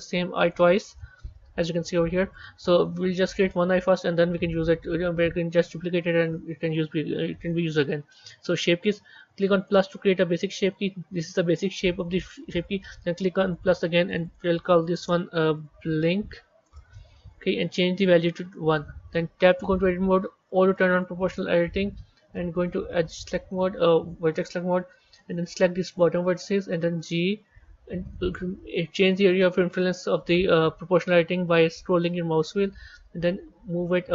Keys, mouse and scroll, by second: 0.4 scroll up 1, 9.5-14.0 drag, 14.1-17.2 drag, 18.0-19.4 drag, 19.4 b, 22.4 click, 23.3-24.2 scroll up 5, 24.2 shift+middle click, 25.8 click.